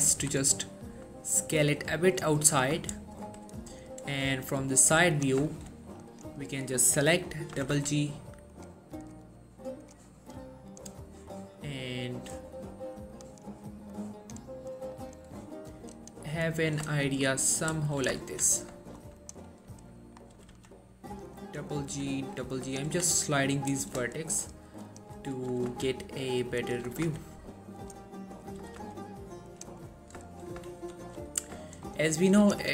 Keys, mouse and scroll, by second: 0.3 alt+s, 2.2 click, 2.6-3.0 scroll down 1, 3.0-3.6 middle click, 3.6 3, 4.0-5.0 scroll up 1, 5.3 click, 5.6 shift+middle click, 6.2 click, 7.6 g, 7.8 g, 8.6 click, 13.3 click, 17.1 shift+middle click, 18.3 1, 18.9 shift+middle click, 19.3 click, 20.0 middle click, 20.4 g, 20.6 g, 21.4 click, 22.0 g, 22.2 g, 22.8 click, 23.0 1, 23.5-24.1 scroll down 1, 24.3 shift+middle click, 25.0 click, 25.6 g, 25.8 g, 26.3 click, 26.9 g, 27.1 g, 27.9 click, 28.7 g, 28.9 g, 29.6 click, 29.9-30.3 scroll down 1, 30.4 shift+middle click, 31.0 3, 31.8 shift+middle click, 32.0-32.3 scroll up 1, 32.5 click.